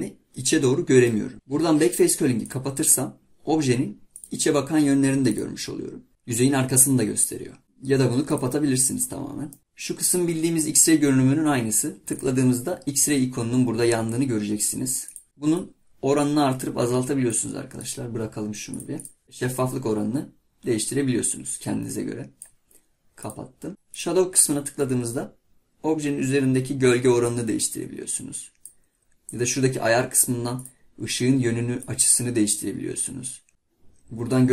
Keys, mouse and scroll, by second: 1.3-3.5 drag, 4.2-6.1 drag, 9.5 middle click, 15.1-17.6 drag, 17.8 click, 18.7 click.